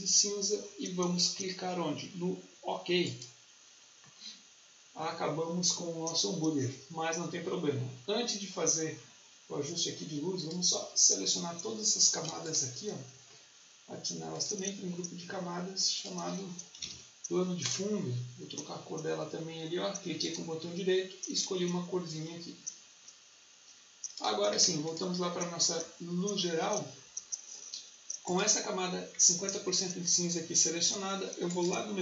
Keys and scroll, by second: 16.4-17.3 typing.